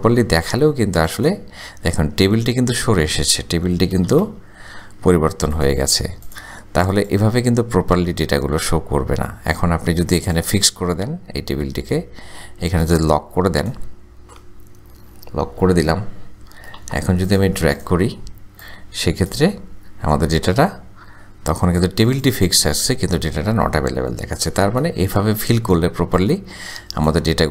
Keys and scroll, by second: 4.3 Return, 16.8 Return, 25.0 Return.